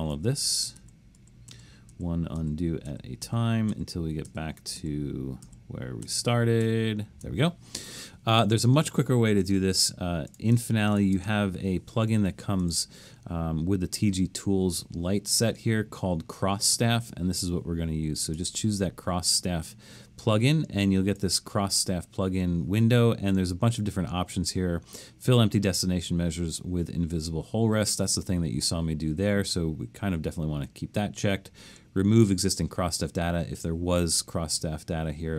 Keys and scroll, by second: 0.1 super+z, 0.4 super+z, 0.8 super+z, 1.2 super+z, 1.5 super+z, 1.9 super+z, 2.4 super+z, 2.9 super+z, 3.2 super+z, 3.7 super+z, 4.3 super+z, 4.8 super+z, 5.5 super+z, 6.0 super+z, 6.6 super+z.